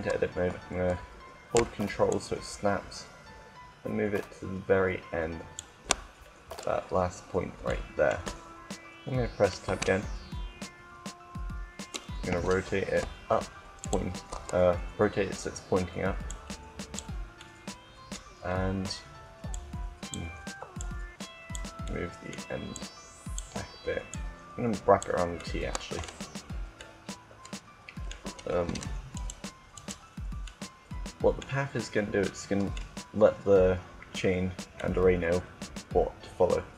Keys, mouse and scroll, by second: 1.8-3.7 drag, 5.8-9.5 middle drag, 9.5 Tab, 12.1 r, 13.7-15.3 drag, 16.2-17.2 drag, 17.2 middle click, 19.1 scroll up 1, 19.2-21.7 drag, 21.7 middle click, 22.5 click, 24.3-25.7 drag, 25.2-28.6 middle drag, 28.4 Tab, 30.2-31.3 right drag, 31.3-33.8 middle drag, 34.6-36.4 middle drag.